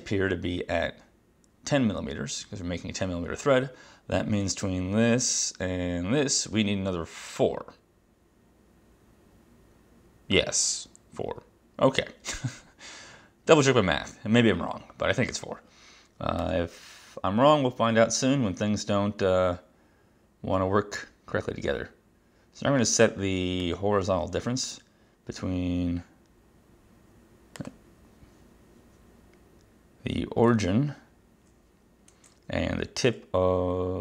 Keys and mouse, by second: 23.7 click, 27.6 click.